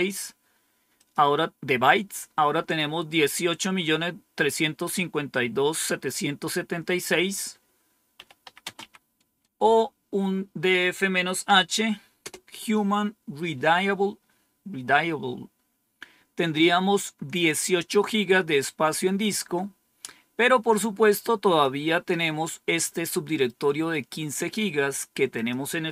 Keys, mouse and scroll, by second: 0.9 click, 7.8-9.2 typing, 11.4-12.1 typing, 21.5-22.8 drag, 25.3 click.